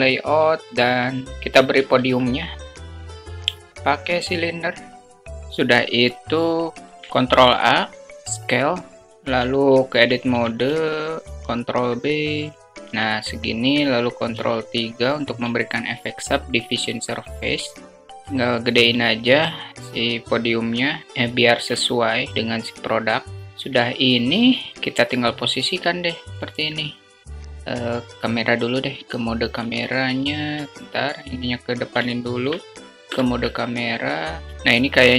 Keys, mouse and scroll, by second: 1.3 shift+a, 3.2 s, 6.8 Tab, 8.1 Tab, 9.1 ctrl+Tab, 9.7 ctrl+b, 11.6 Tab, 13.2 ctrl+3, 17.1 s, 21.0 ctrl+z, 30.6 alt+shift+middle drag, 31.5 ctrl+alt+KP_0, 32.9 q.